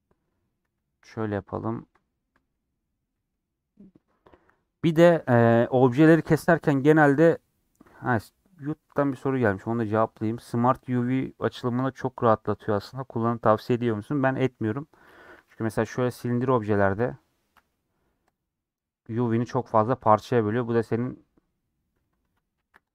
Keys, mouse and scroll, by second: 0.7 2, 1.4-2.4 alt+drag, 2.4-15.4 middle drag, 15.4 a, 22.0 middle click, 22.3 Tab.